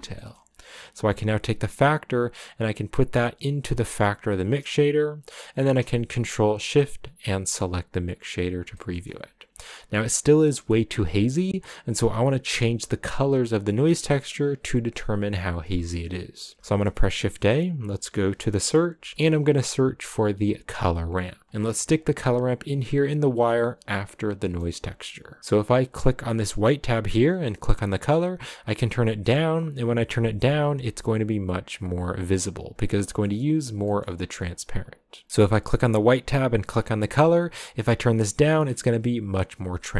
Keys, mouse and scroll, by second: 6.0 ctrl+shift+click, 8.7 shift+middle click, 9.0-10.4 scroll up 1, 10.6 middle click, 11.3 click, 21.5 middle click, 21.6 click, 26.3-27.6 drag, 31.3 click, 33.1-34.7 middle drag, 34.7 click, 36.1 click.